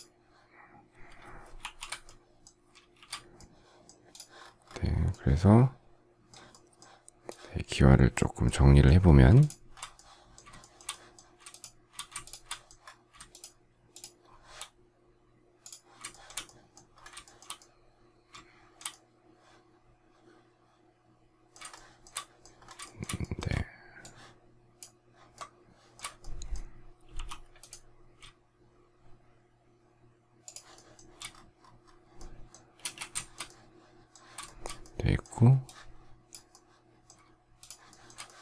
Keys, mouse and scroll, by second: 1.8 shift+h, 2.0 shift+middle click, 2.9 shift+c, 9.4 shift+click, 9.7-10.4 shift+scroll, 10.5 shift+middle click, 11.4 shift+click, 12.2 shift+click, 13.2 shift+click, 13.9 shift+click, 14.2-14.6 shift+scroll, 16.0 shift+middle click, 17.2 shift+middle click, 21.7 shift+middle click, 22.8 shift+middle click, 23.9 ctrl+shift+click, 25.3 shift+middle click, 27.1 m, 30.4 shift+click, 30.7 shift+middle click, 32.7 space, 33.1 shift+middle click, 34.6 shift+middle click, 37.5 shift+click, 37.8 shift+middle click.